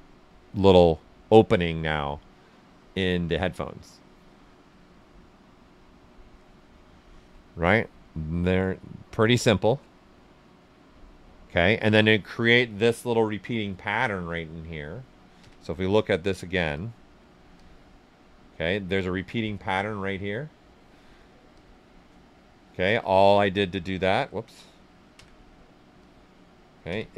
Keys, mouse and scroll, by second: 4.8-6.2 right drag, 4.8 typing, 6.2-8.0 alt+right drag, 8.0-9.9 right drag, 9.9 right click, 11.0-15.3 alt+right drag, 15.3 typing, 15.9 click, 17.5-21.0 drag, 21.5-22.8 drag, 21.5-22.8 typing, 23.3-25.1 drag, 25.1 z, 25.9 click, 26.8 z.